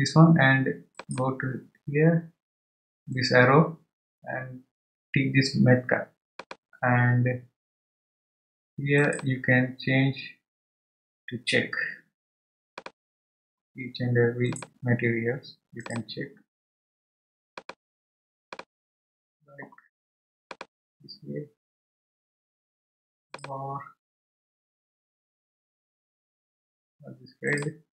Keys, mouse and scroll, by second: 0.9-4.1 drag, 17.5-20.6 drag.